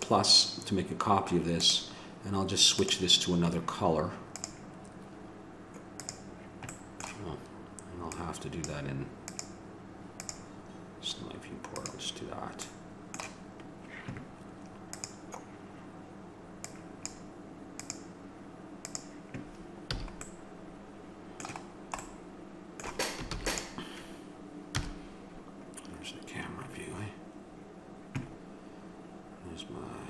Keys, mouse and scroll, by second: 4.4-6.3 drag, 6.7-8.1 middle drag, 8.1-11.6 drag, 15.0-19.6 drag, 19.9 a, 23.3 ctrl+s, 24.8 KP_0.